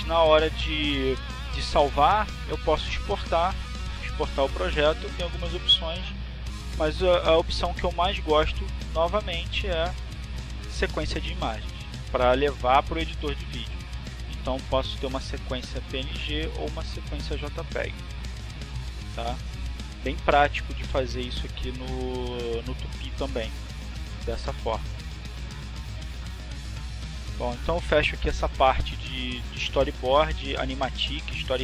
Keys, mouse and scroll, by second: 5.9 click, 9.1 click, 15.1 click, 17.0 click, 20.4 click, 21.5 click, 23.4 click, 30.3 click, 31.1 click.